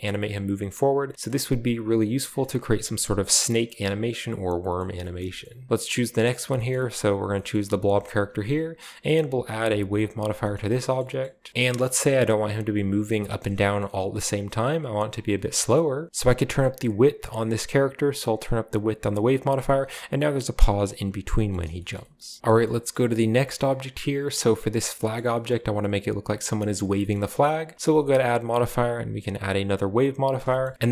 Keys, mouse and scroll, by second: 1.1-1.6 right drag, 1.3-1.6 scroll up 1, 2.4-3.9 scroll down 1, 2.5 middle click, 2.6 g, 2.9 middle click, 4.6-5.2 right drag, 4.8 middle drag, 5.0-6.5 scroll up 1, 5.2 shift+middle click, 5.4-6.5 shift+middle drag, 6.5 right drag, 6.5 space, 6.7 middle click, 6.7-8.5 shift+scroll up 1, 8.5 click, 8.9-9.7 typing, 10.0 click, 10.3-11.2 scroll down 1, 10.4-11.0 shift+middle drag, 11.2 middle click, 11.8-13.1 middle drag, 13.4 shift+middle click, 13.6-16.0 scroll up 1, 13.8-16.0 middle drag, 16.0-19.1 drag, 19.5-20.6 middle drag, 20.6-21.5 scroll up 1, 20.8-21.7 middle drag, 21.7-22.4 shift+scroll down 1, 21.9 shift+middle click, 22.4 middle drag, 22.4 scroll up 1, 22.4 a, 22.7 shift+middle click, 22.9 middle click, 23.4-24.9 shift+right drag, 23.6 middle click, 23.7-24.9 scroll up 1, 24.9 middle drag, 24.9 scroll down 1, 25.2 middle drag, 25.5 middle click, 25.7 scroll down 1, 26.6-27.0 middle drag, 26.8-27.9 scroll up 1, 27.1 shift+middle click, 27.4 middle click, 28.0 click, 28.2-29.0 typing, 29.6 click, 30.2-30.7 scroll down 1, 30.7 scroll up 1, 30.7-30.9 drag.